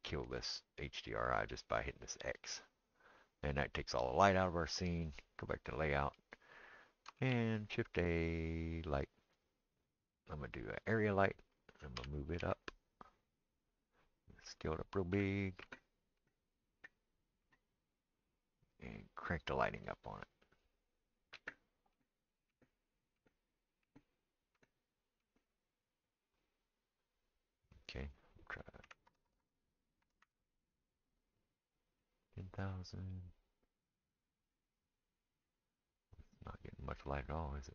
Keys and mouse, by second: 5.5-20.5 middle drag, 11.9 g, 14.4 s, 19.3 click, 20.5-37.7 drag, 29.2 KP_0, 29.4 KP_0.